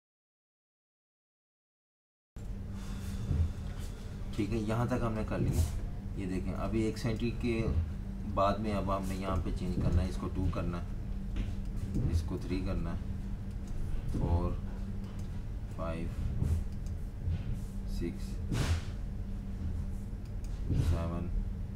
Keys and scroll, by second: 2.3 Page_Up, 3.6-6.7 typing, 8.2 v, 10.4 2, 12.3 3, 14.0 4, 15.6 5, 17.9 6, 20.8 7.